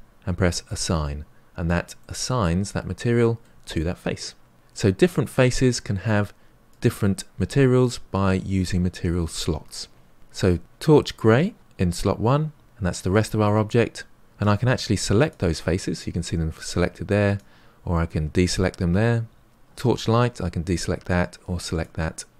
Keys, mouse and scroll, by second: 1.9-10.6 middle drag, 18.5-20.7 drag.